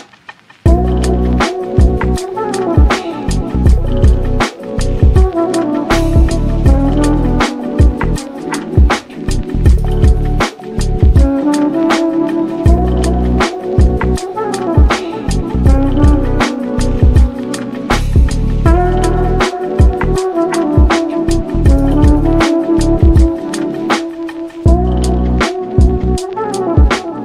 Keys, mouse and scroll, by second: 0.6 g, 3.7 Tab, 4.8 1, 4.9 click, 6.4 g, 7.9 click, 8.3 g, 10.6 g, 11.4 middle click, 12.3 ctrl+shift+b, 13.0 ctrl+z, 13.9 Tab, 15.2 Tab, 15.4 click, 15.9 g, 17.8 2, 18.2 click, 19.0 KP_3, 21.2 z, 21.5 shift+click, 22.2 1, 22.4 shift+click, 22.9 z, 23.7 g, 26.4 middle click, 26.9-27.2 scroll up 2.